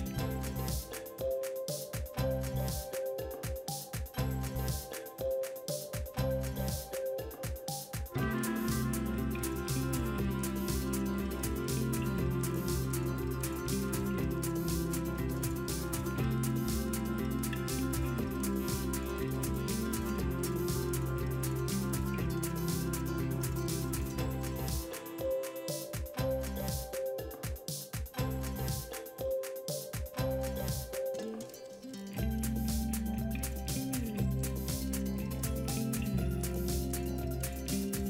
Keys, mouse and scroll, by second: 17.6-17.9 middle drag.